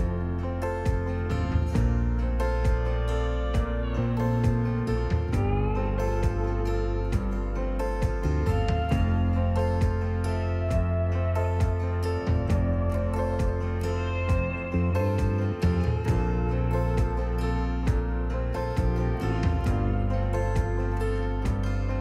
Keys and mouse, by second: 1.5 s, 1.8 x, 6.3 click, 8.0-8.9 drag, 11.1 shift+a, 18.5 r, 19.1 z, 19.3 KP_9, 19.5 KP_0, 19.7 KP_Enter, 21.0 r, 21.7 x, 21.9 KP_9.